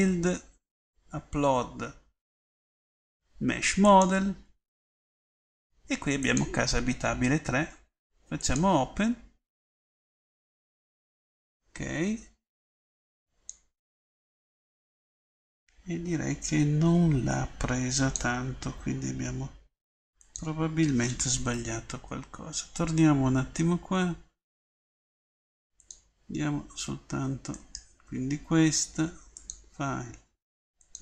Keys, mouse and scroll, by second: 23.2-24.8 drag, 29.4 middle click, 29.6 click.